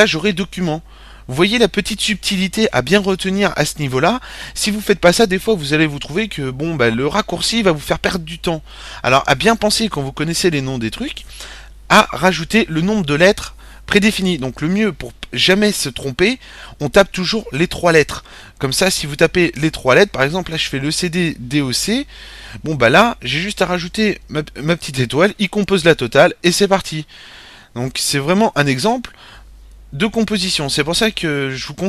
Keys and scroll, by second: 18.8-22.0 typing, 24.2 typing, 25.5 typing.